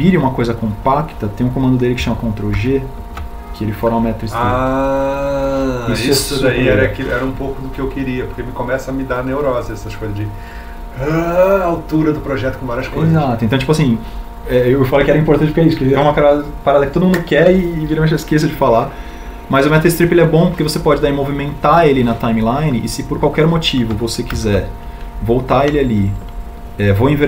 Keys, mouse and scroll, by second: 3.5 ctrl+g, 21.3 g, 24.7 Escape.